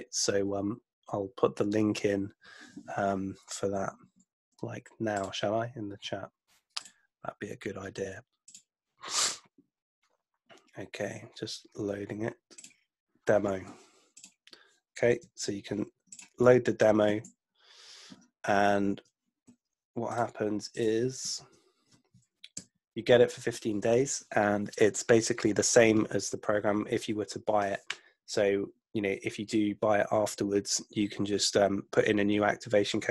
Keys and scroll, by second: 4.1 super+Tab, 15.4 super+c, 17.4 super+Tab, 21.4 super+v, 22.5 Return.